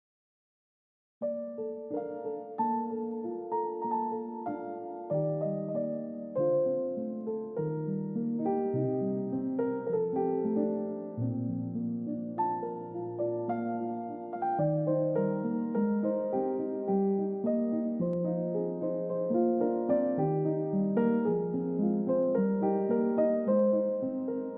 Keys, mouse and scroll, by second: 3.3 shift+click, 10.6 shift+click, 17.1 shift+click, 22.5-23.0 scroll down 1.